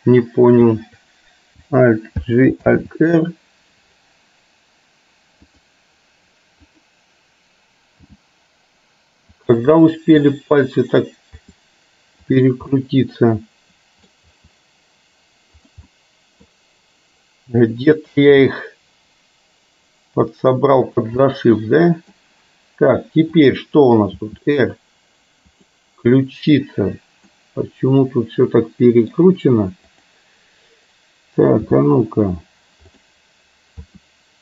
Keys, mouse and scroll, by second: 0.0-0.7 drag, 2.2 alt+g, 2.7 alt+r, 5.7 click, 6.7 click, 8.2 g, 11.6 r, 12.8-14.2 middle drag, 14.3 r, 16.0-17.3 middle drag, 18.3 g, 21.2-22.2 middle drag, 23.3 click, 24.3 r, 27.3-29.2 middle drag, 31.7 g, 34.0 r.